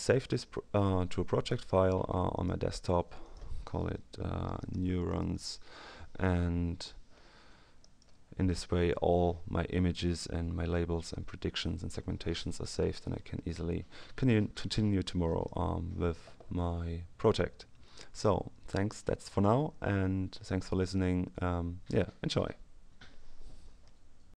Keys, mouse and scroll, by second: 2.3 click, 3.1 click, 4.2-5.8 typing, 7.7 click, 15.2 click, 24.3 ctrl+alt+s.